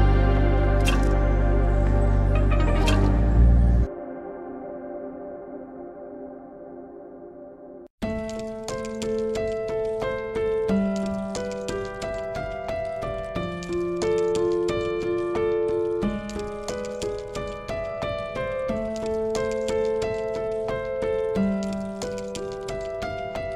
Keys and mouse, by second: 0.4 Tab, 1.5 click, 4.7 Tab, 5.5 click, 6.9 g, 9.3 Tab, 10.5 click, 14.7 Tab, 15.5 click, 16.5 g, 19.1 click, 21.2 click, 21.4 click, 23.3 Tab.